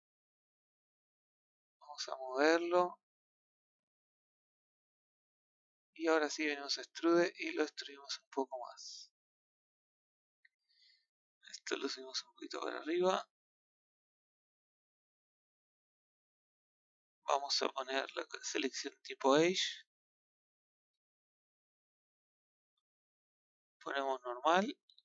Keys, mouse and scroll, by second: 2.3-3.0 drag, 3.8 click, 6.6 click, 9.8 click, 11.6 click, 12.5 click, 14.6-18.6 middle drag, 18.6 click, 20.0 click, 21.5 KP_1, 24.5-25.0 drag.